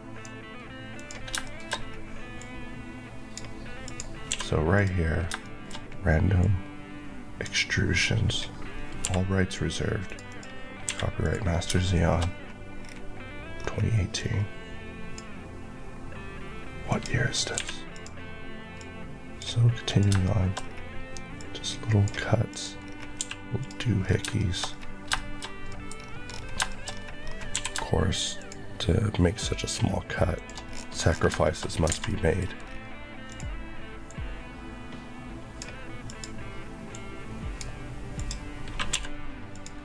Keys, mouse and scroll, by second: 0.8 click, 1.2 shift+click, 1.3 shift+middle click, 1.7-2.3 scroll up 1, 2.3 click, 3.7 click, 4.2 q, 4.7 click, 5.0 scroll down 2, 5.3 shift+middle click, 5.6-6.2 shift+scroll up 2, 6.3 click, 8.9 b, 9.9 click, 10.8 q, 11.1 click, 11.6 shift+click, 11.8 shift+middle click, 12.7 scroll down 1, 13.8-14.1 scroll up 1, 14.1 click, 16.8 click, 17.4 click, 17.5 q, 17.8 click, 20.0 shift+click, 20.1 shift+middle click, 20.5 scroll up 1, 21.3 click, 22.4 click, 22.7 scroll down 1, 23.1 q, 23.5 click, 23.9-24.2 scroll down 2, 24.2 shift+middle click, 24.5-25.0 scroll up 2, 25.0 shift+middle click, 25.8 scroll up 1, 26.5-27.1 shift+scroll up 2, 26.6 shift+middle click, 27.4 scroll up 1, 27.4 q, 28.3 shift+click, 30.2 shift+Left, 30.6 scroll down 1, 31.3 shift+middle click, 31.6 scroll up 1, 31.8 alt+a, 32.5 scroll, 32.6 scroll down 1, 33.2 click, 38.8 click, 38.8 q, 39.4 click.